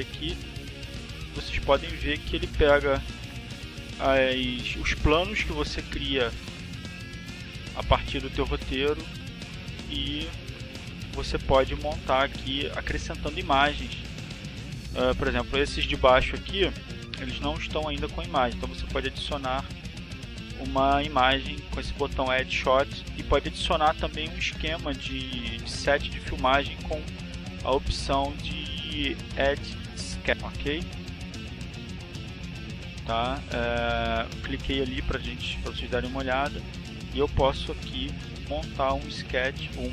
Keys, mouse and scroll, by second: 8.4 middle click, 9.2 middle click, 9.4 middle click, 9.6 click, 10.4 middle click, 10.9 middle click, 11.6 click, 13.5 click, 21.9 click, 22.8 click, 23.9 click, 26.6-27.8 drag, 30.3 click, 33.9 click, 34.5 click, 36.7-38.4 drag, 39.0 click.